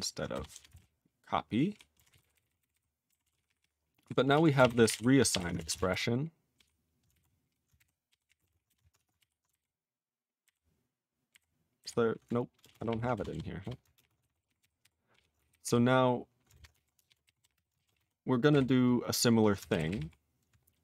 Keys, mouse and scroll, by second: 0.3 Delete, 0.5 Delete, 0.7 ctrl+a, 0.8-1.7 ctrl+p, 2.2 ctrl+s, 2.3 ctrl+n, 2.4 ctrl+e, 2.5 ctrl+n, 2.6 ctrl+n, 2.7 ctrl+n, 3.2 ctrl+s, 3.3 ctrl+p, 3.5 ctrl+p, 3.6 ctrl+p, 4.0 ctrl+p, 4.3 ctrl+a, 4.5 ctrl+space, 4.6 ctrl+e, 4.7 ctrl+n, 4.8 ctrl+n, 4.8 ctrl+g, 4.9 ctrl+e, 5.3 ctrl+p, 5.4 ctrl+e, 5.6 Return, 5.7 Return, 5.9 ctrl+y, 6.6 ctrl+p, 7.8 ctrl+g, 8.1 ctrl+p, 8.3 ctrl+e, 8.4 ctrl+space, 8.4 ctrl+a, 8.5 ctrl+p, 8.7 BackSpace, 9.0 Tab, 9.2 ctrl+y, 10.4 alt+y, 11.3 alt+y, 11.8 alt+y, 12.6 ctrl+space, 12.6 ctrl+a, 12.7 ctrl+p, 12.9 ctrl+p, 13.2 BackSpace, 13.3 BackSpace, 13.6 BackSpace, 13.9 ctrl+space, 14.0 ctrl+a, 14.0 ctrl+p, 14.2 alt+w, 14.3 ctrl+n, 14.5 ctrl+n, 14.6 ctrl+n, 14.8 ctrl+y, 15.1 ctrl+p, 15.4 alt+b, 15.5 alt+b, 15.6 alt+b, 17.9 ctrl+space, 17.9 ctrl+e, 18.0 ctrl+g, 18.5 ctrl+n, 19.8 ctrl+k, 19.9 ctrl+k, 20.0 ctrl+p.